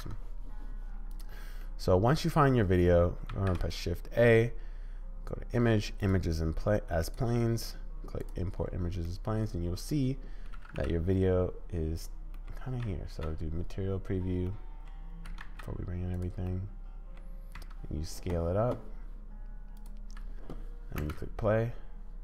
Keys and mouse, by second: 1.6-2.6 middle drag, 3.3 shift+a, 9.0-10.5 middle drag, 10.5 g, 12.3 click, 12.8 z, 14.5 click, 15.2 g, 16.5 middle click, 17.5 s, 21.0 space.